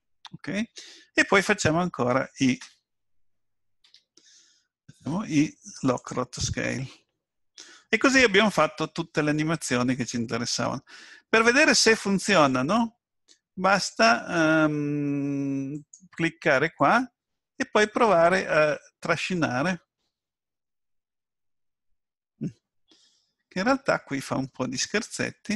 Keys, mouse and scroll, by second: 5.0 i, 15.7 click, 16.8 click.